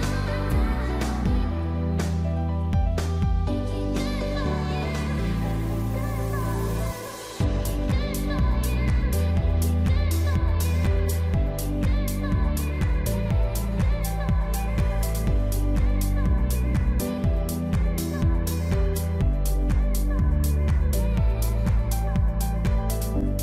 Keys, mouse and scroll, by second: 1.0 Tab, 1.2 shift+middle click, 1.4 middle click, 1.8 scroll up 1, 2.3 ctrl+r, 3.4 middle click, 3.8-4.2 scroll down 3, 3.9 middle click, 4.2 Tab, 4.3 middle click, 6.0 Tab, 6.2 middle click, 6.7 shift+middle click, 6.9-7.3 scroll up 3, 7.1 middle click, 7.8 click, 8.0 middle click, 8.7-9.2 scroll up 2, 9.2 shift+click, 9.5 middle click, 9.8 scroll down 1, 10.4 middle click, 11.1 shift+click, 11.5 shift+click, 11.6 middle click, 12.4 click, 14.0 Tab, 14.2 middle click, 14.5-15.1 scroll down 2, 14.7 middle click, 15.9 scroll down 1, 16.1 middle click, 16.5 Tab, 16.7 middle click, 18.6 click, 18.9 middle click, 19.0-19.9 scroll up 5, 19.9 click, 20.3 click, 20.5 shift+click, 20.7 shift+click, 21.0 scroll down 3, 21.1 middle click, 21.4 s, 22.7 scroll down 3, 22.8 middle click, 23.2 Tab, 23.3 middle click.